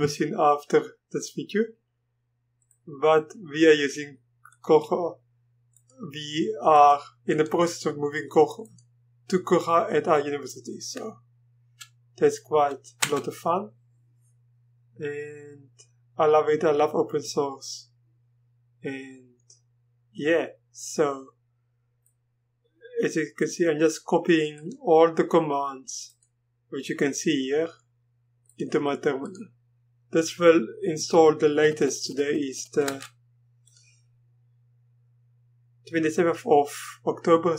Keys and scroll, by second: 13.0 Return, 32.8 Return.